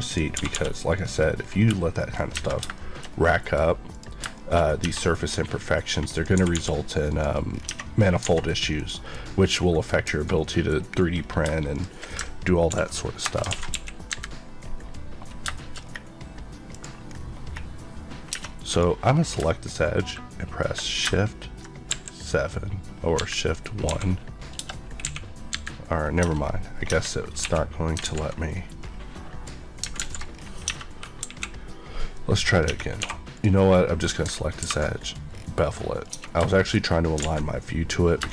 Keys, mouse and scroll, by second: 0.0 click, 0.3 typing, 0.9 click, 1.4 scroll, 1.4-2.1 scroll down 1, 2.1 scroll down 1, 2.3 Tab, 2.7 shift+middle click, 3.0 scroll up 1, 3.3 middle click, 3.6 scroll up 1, 3.9 click, 4.3 middle click, 4.5-5.4 scroll up 2, 4.8 Tab, 6.1 click, 6.3 typing, 7.1 click, 7.5-8.5 scroll down 3, 7.6 Tab, 8.3 alt+a, 8.7 click, 9.1 middle click, 10.8 scroll down 1, 10.9 scroll, 11.4 shift+scroll down 1, 11.7 shift+click, 12.7 ctrl+l, 13.2 Return, 13.5 alt+a, 13.7 KP_1, 14.7-15.3 scroll, 15.4-16.7 scroll up 3, 15.6 shift+middle click, 16.7 click, 17.1 scroll up 1, 18.2 Tab, 18.7 click, 21.8 shift+KP_7, 23.1 shift+KP_3, 23.8 shift+KP_1, 25.0 KP_1, 26.2 Tab, 26.8 scroll up 1, 27.4 1, 28.4-28.8 scroll down 1, 28.8 middle click, 29.9 alt+z, 30.3 scroll down 1, 30.6 Tab, 31.2 KP_1, 32.1 middle click, 32.5 scroll up 1, 32.6 Tab, 33.0 2, 33.3 click, 33.6 middle click, 34.6 ctrl+b, 35.3 scroll down 1, 36.0 click, 36.3 Tab, 36.5 middle click, 36.8 scroll down 1, 37.2 alt+a, 37.3 middle click, 37.9 scroll down 1, 38.2 shift+middle click.